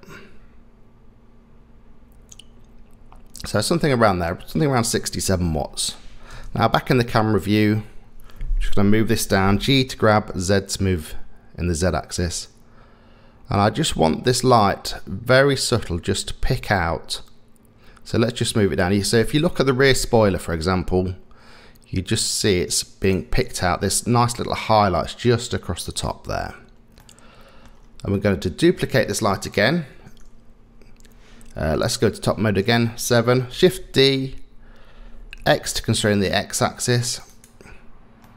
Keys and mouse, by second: 5.3 middle click, 6.3 KP_0, 9.6 g, 27.0 middle click, 28.1 middle click, 31.9 KP_7, 33.7 shift+d, 38.2-38.3 middle drag.